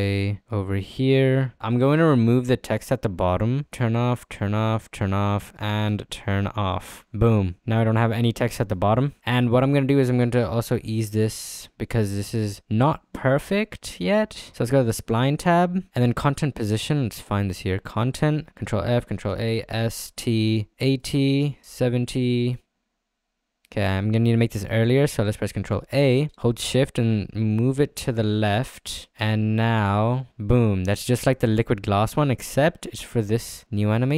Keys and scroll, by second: 18.5 ctrl+f, 19.3 ctrl+a, 19.5 s, 19.9 t.